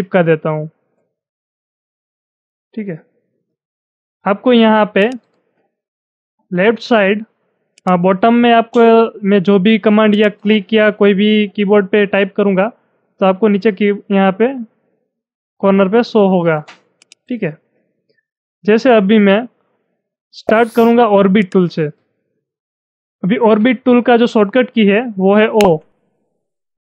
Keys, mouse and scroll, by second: 5.0 click, 7.8 click, 10.1 click, 11.2-12.1 typing, 17.0 click, 21.4 click, 25.4 o.